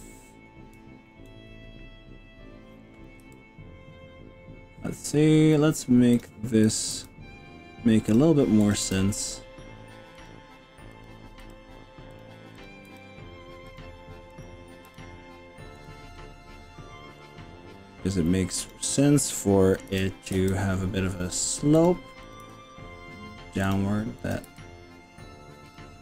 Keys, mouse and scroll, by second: 1.4-2.3 scroll up 5, 3.2 g, 6.7 click, 6.9 g, 8.1 click, 8.7 click, 8.9 g, 10.3 click, 10.9 click, 11.5 g, 12.1 click, 12.9 g, 13.7 click, 14.3 click, 14.9 g, 15.9 click, 16.2-17.3 middle drag, 18.7 click, 19.9 KP_3, 20.5 g, 22.3 click, 22.5 g, 23.7 click, 24.3 click, 24.5 g.